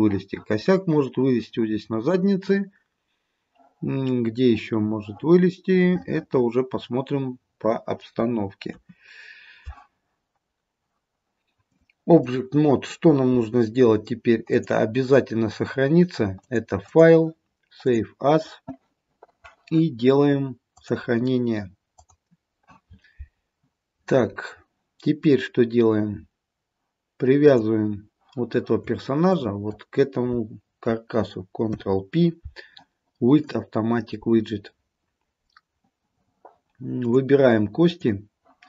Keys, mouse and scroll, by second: 5.9-6.9 scroll down 1, 8.8 KP_3, 11.8 click, 14.6 click, 17.0 click, 27.5 click, 29.4 shift+click, 31.8 ctrl+p, 37.1 click, 37.9 click.